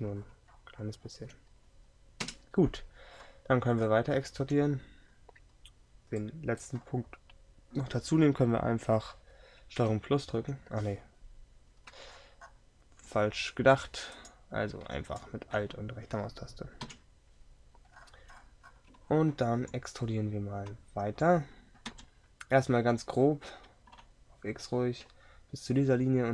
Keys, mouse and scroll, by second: 2.3 KP_7, 9.9 ctrl+KP_Add, 17.0 KP_7, 22.0 e.